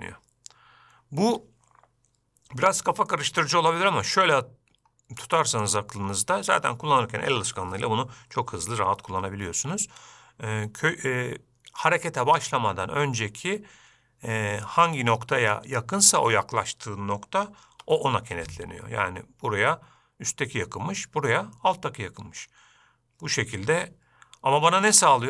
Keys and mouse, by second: 3.5-4.1 middle drag, 5.7 shift+middle click, 12.5-13.0 middle drag, 18.1 g.